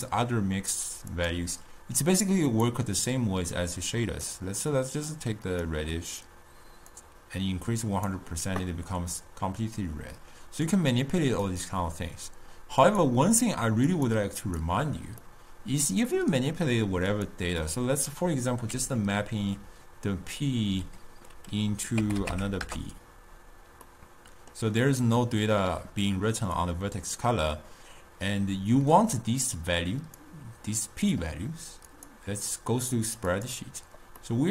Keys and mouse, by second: 2.6 click, 6.3 click, 7.3-10.2 drag, 11.1 click, 13.0 click, 14.5 click, 15.5-17.1 middle drag, 17.1-20.4 drag, 24.0-26.7 middle drag, 26.7 click, 30.7-34.5 drag.